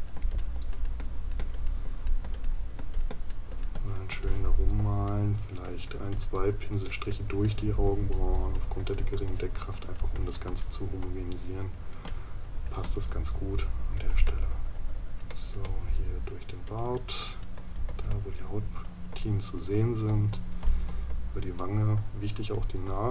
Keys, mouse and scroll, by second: 5.1 right click.